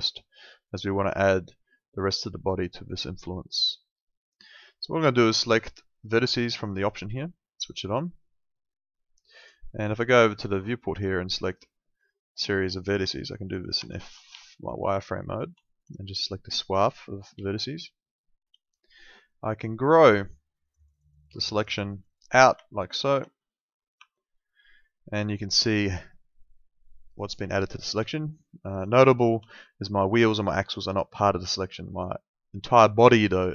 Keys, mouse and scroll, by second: 6.6 click, 12.1 alt+middle click, 13.8 F3, 14.4 alt+middle click, 15.6 alt+middle click, 16.2 click, 17.6 alt+middle click, 20.7 click, 22.7 alt+middle click, 24.0 F3, 25.3 alt+middle click, 29.2 middle click, 29.4 alt+middle click.